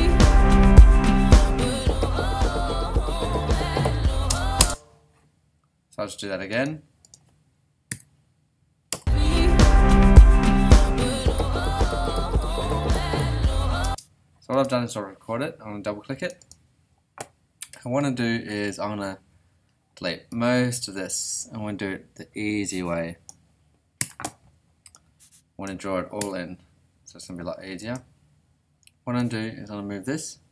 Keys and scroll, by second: 4.6 space, 7.9 BackSpace, 8.9 r, 13.8 space, 24.0 BackSpace, 26.2 BackSpace, 27.3 Escape.